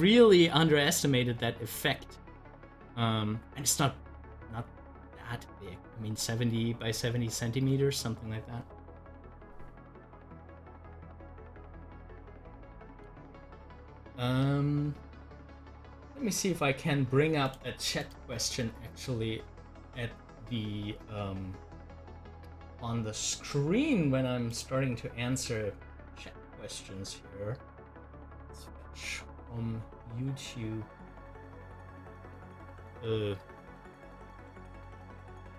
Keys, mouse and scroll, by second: 17.5 click, 22.0 click, 27.7 click.